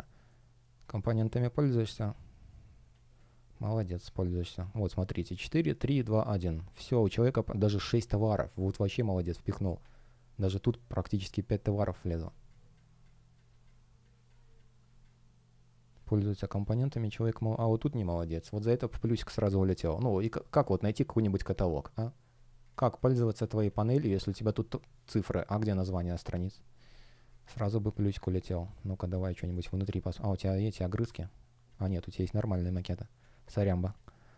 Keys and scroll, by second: 0.0 shift+o, 0.9 space.